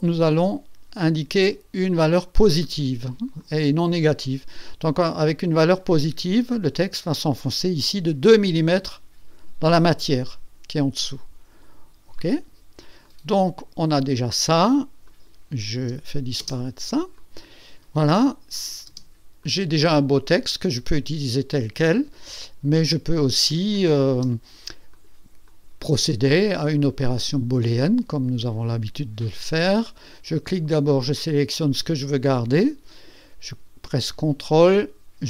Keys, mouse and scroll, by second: 0.3 scroll up 1, 1.1 scroll up 1, 2.6 click, 3.4 click, 4.2-6.0 drag, 12.2 click, 13.0-14.4 drag, 15.0 click, 16.4 space, 17.2 click, 18.5 click, 18.9 space, 19.4-21.4 drag, 24.1 space, 24.9 click, 25.5-26.3 drag, 27.2 click, 30.7 click, 31.7 click, 32.2 click.